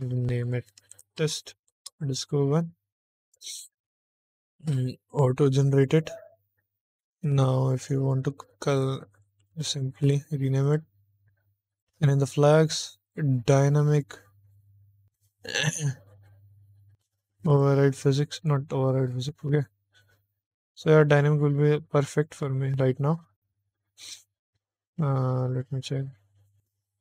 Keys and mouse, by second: 0.3-3.2 drag, 5.3 click, 7.7 ctrl+click, 9.0 ctrl+click, 10.5 click, 11.6 click, 13.0 click, 17.4 click, 18.3 click.